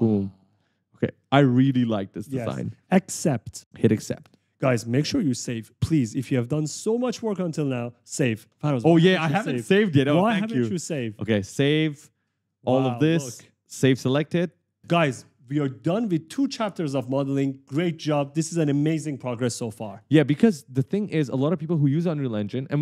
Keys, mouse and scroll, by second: 0.2-1.0 typing, 4.2 click, 5.0 click, 5.3 right click, 5.6 e, 6.4 d, 11.7 click, 13.9 click, 14.8 right click, 15.9-19.7 typing.